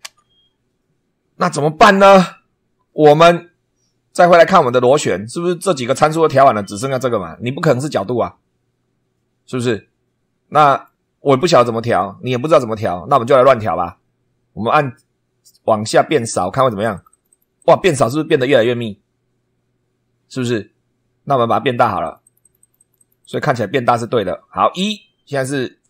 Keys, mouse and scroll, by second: 0.0 super+2, 2.1-3.1 shift+middle drag, 4.5 click, 10.6 click, 16.5-17.9 drag, 22.0-23.5 drag.